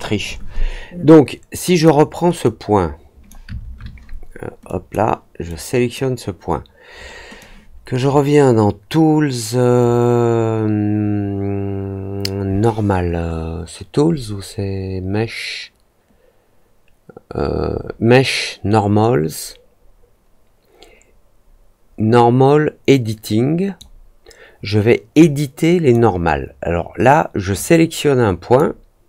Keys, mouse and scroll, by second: 1.7 click, 2.4-3.2 drag, 4.6 click, 5.4 click, 7.3-23.7 drag, 25.1 click, 27.5-28.5 drag.